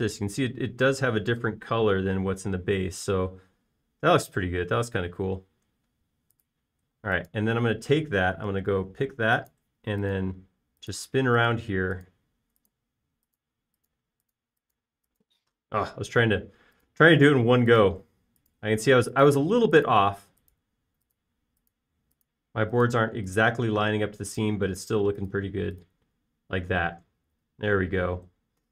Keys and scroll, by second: 8.3 space, 9.7 b, 12.3 typing, 28.1 space.